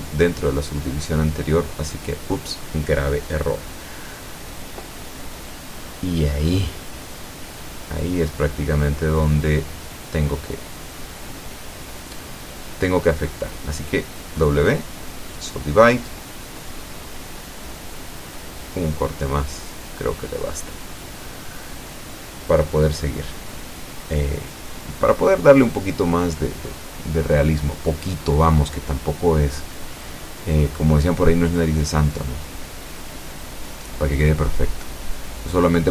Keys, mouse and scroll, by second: 0.4 c, 1.1-2.9 drag, 3.0 Escape, 3.1 middle click, 4.4 c, 4.8-6.3 drag, 6.4 Escape, 6.6-8.2 middle drag, 8.6 shift+right click, 9.0 shift+right click, 9.8-10.8 shift+middle drag, 11.0 scroll up 3, 11.4 shift+middle click, 12.3 scroll down 1, 12.6-13.6 middle drag, 14.5 w, 15.3 click, 17.3 click, 19.0-20.1 middle drag, 20.3 scroll down 1, 22.2-23.3 middle drag, 23.9-25.0 middle drag, 25.7 middle click, 26.9 middle click, 29.6 ctrl+Tab, 30.9 alt+Tab, 31.9 alt+click, 33.2 click, 33.7 middle click, 35.6 click.